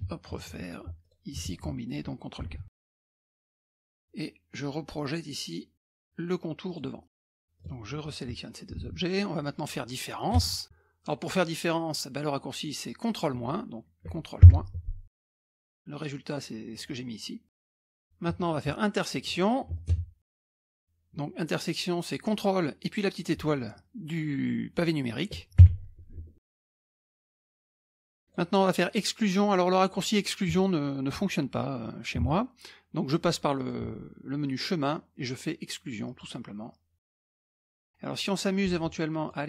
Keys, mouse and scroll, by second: 1.0 click, 1.4 shift+click, 2.8 ctrl+k, 3.5 middle click, 3.5 scroll down 1, 6.7 click, 7.6 click, 8.0 shift+click, 8.4-9.4 drag, 9.4-10.0 scroll up 1, 10.2-11.4 drag, 10.4 space, 14.4 ctrl+KP_Subtract, 15.3 click, 16.7 click, 18.0 click, 18.4 shift+click, 19.3 shift+click, 19.7 shift+click, 19.9 space, 25.6 ctrl+KP_Multiply, 26.7 click, 26.9 shift+click, 27.2 click, 27.2 space, 27.7 click, 27.9 space, 33.6 click, 36.1 click, 37.0 click, 37.6 click, 39.2 click.